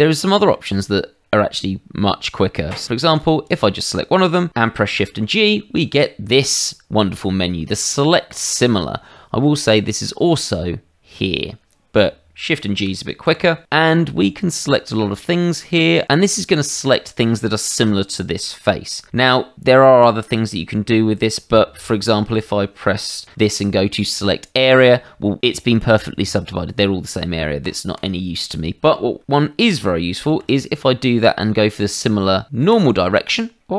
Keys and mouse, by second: 3.1 click, 3.4 click, 5.0 shift+g, 9.7 click, 13.2 shift+g, 23.2 shift+g, 24.7 click, 27.6 click, 27.9 click, 30.3 shift+g, 32.7 click, 33.6 middle click.